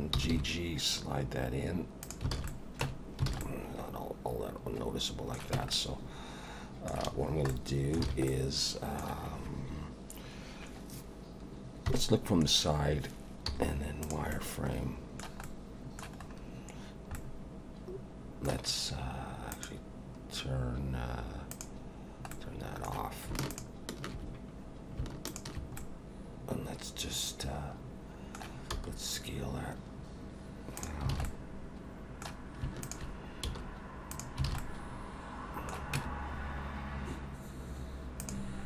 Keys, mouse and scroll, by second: 0.1 g, 2.3 alt+a, 2.5 middle click, 2.9 Tab, 3.3 alt+a, 3.4 middle click, 5.5 Tab, 5.7 middle click, 7.0 a, 7.2 scroll down 3, 7.5 middle click, 8.1 alt+a, 8.3 middle click, 11.9 KP_3, 13.5 z, 14.3 middle click, 15.4 middle click, 16.2 scroll up 4, 17.1 middle click, 19.5 click, 21.5 click, 22.3 middle click, 23.5 alt+shift+click, 25.8 middle click, 28.7 s, 31.1 alt+a, 31.3 middle click, 32.8 alt+shift+click, 33.4 s, 34.5 alt+a, 34.6 middle click, 36.0 Tab, 38.2 click, 38.6 scroll down 3.